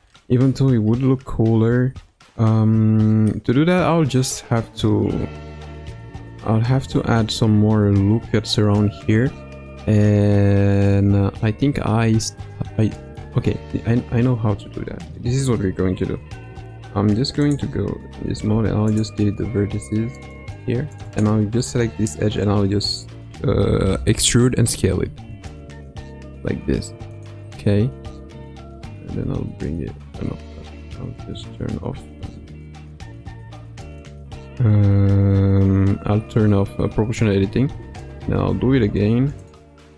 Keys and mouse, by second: 12.4 middle click, 17.7 1, 18.5 x, 20.1 click, 20.4 click, 20.9 click, 25.0 e, 29.1 g, 32.2 o, 37.3 e.